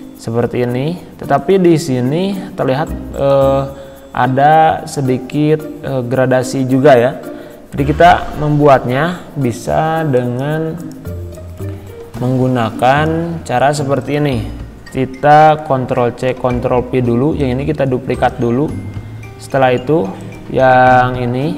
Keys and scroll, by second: 15.7 ctrl+c.